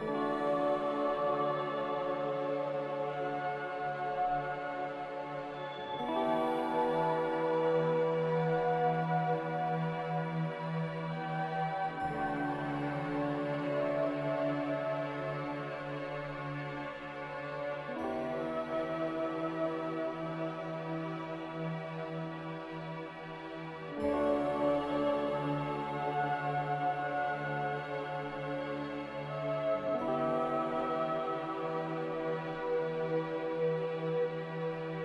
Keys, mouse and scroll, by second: 8.1 a, 13.2 middle click, 13.8 a, 21.9 z.